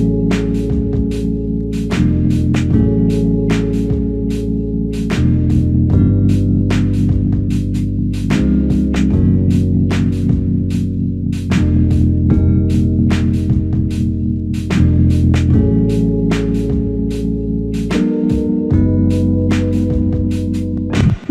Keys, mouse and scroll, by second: 1.5 alt+click, 12.5 ctrl+click, 20.1 alt+shift+click.